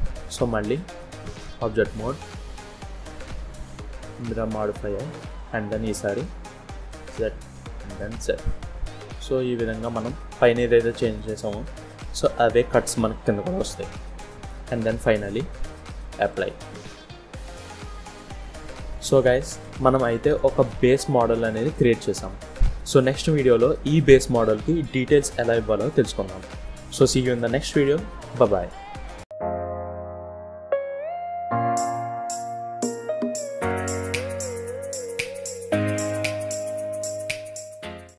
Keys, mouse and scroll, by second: 0.4-0.7 scroll down 1, 0.7 Tab, 1.6 click, 4.8 middle click, 6.0 click, 6.6 click, 7.7 click, 8.4 middle click, 9.5 scroll down 1, 9.8 middle click, 11.7 shift+middle click, 11.9 shift+scroll up 1, 13.3 middle click, 14.1 middle click, 15.4 click, 16.6 scroll down 1, 16.8 middle click, 17.9 click, 18.3 scroll down 2, 18.6 middle click, 20.1 KP_1, 20.8-21.3 scroll up 3, 21.3 click, 21.9-22.3 scroll down 2, 22.3 middle click, 23.2 scroll up 2, 23.6 shift+middle click, 25.0 scroll down 2, 28.1-28.9 scroll down 4, 28.9 middle click.